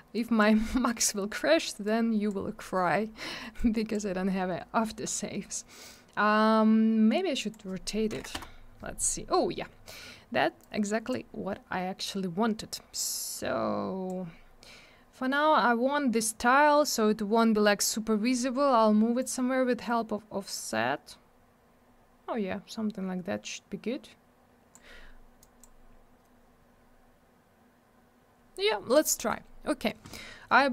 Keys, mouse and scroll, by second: 0.1 click, 3.5 click, 7.4 click, 7.5 click, 8.1 9, 8.3 Return, 10.6 click, 13.2 click, 19.2 click, 25.4 click, 28.9 click, 29.0 click.